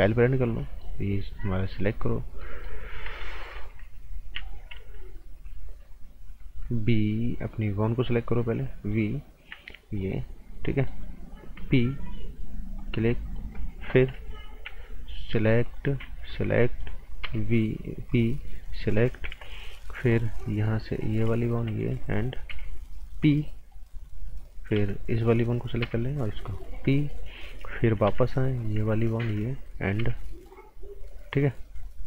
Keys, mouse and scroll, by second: 0.6 right click, 1.3 click, 2.4 right click, 3.5 typing, 4.7 typing, 6.4 typing, 8.0 click, 9.9 shift+click, 10.5 right click, 11.5 p, 12.8 click, 13.1 right click, 14.5 b, 15.3 click, 16.2 shift+click, 16.5 right click, 17.2 p, 18.1 click, 18.4 right click, 19.2 z, 19.6 right click, 21.0 click, 21.5 click, 21.9 right click, 22.5 p, 23.2 click, 23.4 right click, 24.7 b, 25.1 click, 25.8 p, 26.6 click, 26.9 right click, 28.0 b, 28.6 click, 29.0 shift+click, 30.0 p, 31.5 scroll up 1.